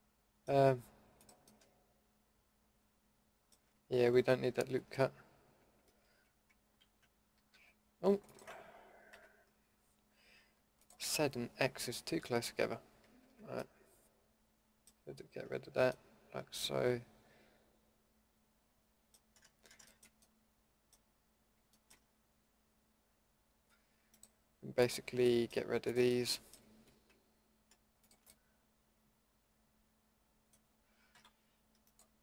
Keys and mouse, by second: 1.2-2.2 middle drag, 4.6 ctrl+z, 6.9 ctrl+z, 7.5 a, 9.1 ctrl+x, 12.6 ctrl+x, 13.3 ctrl+x, 15.3 Tab, 15.6 Tab, 28.5-31.1 middle drag, 31.1 Delete.